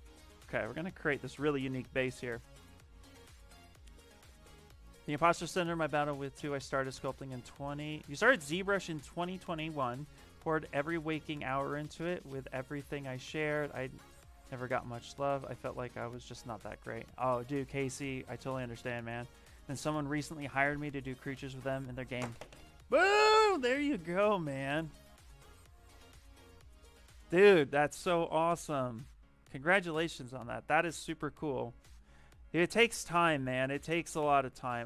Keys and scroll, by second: 29.4 space.